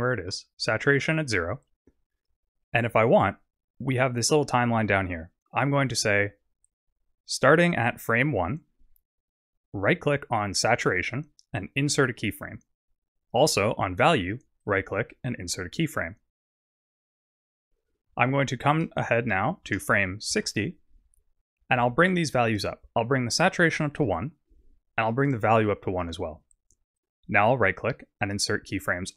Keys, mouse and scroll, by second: 1.5-2.0 scroll down 6, 6.5-7.4 scroll up 6, 10.9 right click, 14.6 right click, 18.5 click, 22.3 click, 25.2 click, 27.0 right click.